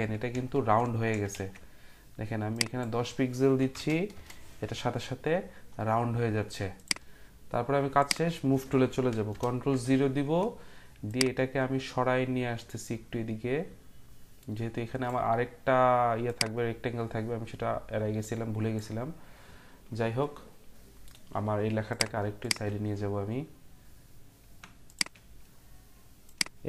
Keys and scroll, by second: 0.8-1.5 typing, 3.4-4.1 typing, 9.3 ctrl+0.